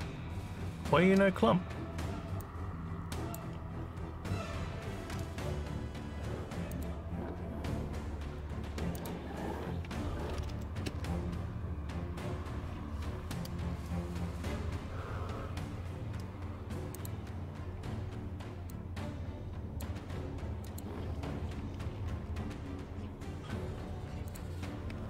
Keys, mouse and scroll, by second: 2.4 click, 6.7 click, 8.9 click, 14.3 scroll down 2, 15.5 scroll up 2, 16.9 click, 18.7-19.8 drag, 20.6 click, 24.2 click.